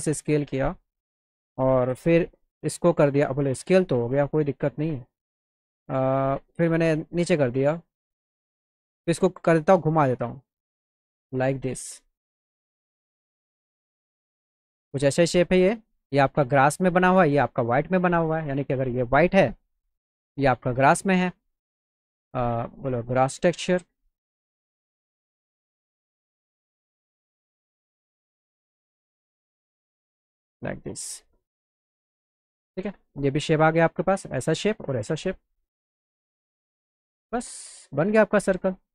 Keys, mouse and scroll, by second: 6.3 click, 7.4-8.7 drag, 9.4 click, 10.5-13.3 drag, 13.7-14.7 alt+middle drag, 15.3 middle click, 17.1 click, 18.2 click, 20.2 click, 23.8 click, 25.3 click, 27.0-28.2 drag, 28.8-30.2 drag, 30.7 click, 33.2 alt+click, 35.4 click.